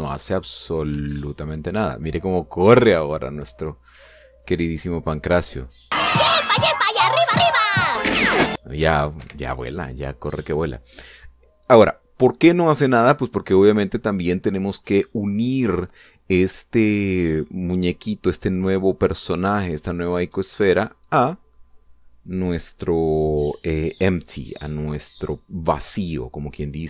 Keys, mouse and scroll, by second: 0.3 p, 1.5 Up, 4.6 Down, 8.5 Down, 9.8 Escape, 13.4 scroll down 2, 16.0 scroll up 2, 18.6 scroll down 2, 20.9 right click.